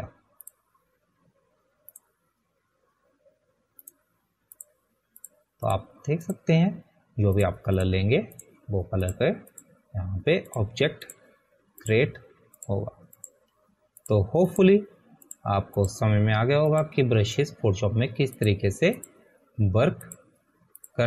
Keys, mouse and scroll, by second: 3.0 click.